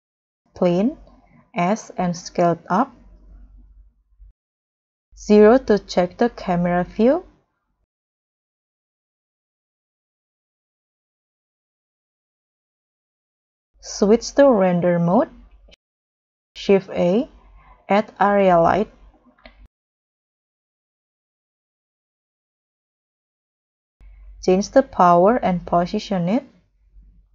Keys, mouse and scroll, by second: 2.0 s, 5.4 scroll down 1, 6.1 scroll down 1, 6.4 0, 7.2-8.1 scroll up 2, 8.1 s, 10.9-12.1 scroll down 1, 12.1 scroll down 1, 15.8 scroll up 1, 16.9 shift+a, 20.0 g, 20.5 z, 24.7 1, 24.8 5, 24.8 1, 24.9 0, 26.6 g.